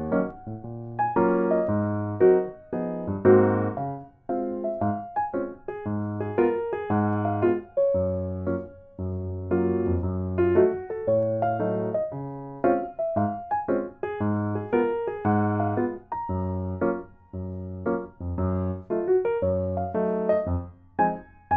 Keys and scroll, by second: 1.2 ctrl+x, 1.5 ctrl+v, 2.0 Delete, 5.4 ctrl+z, 6.5 Delete, 7.4 ctrl+z, 9.4 Tab, 9.8 ctrl+a, 13.2 Tab, 14.6 typing, 17.7-18.3 typing.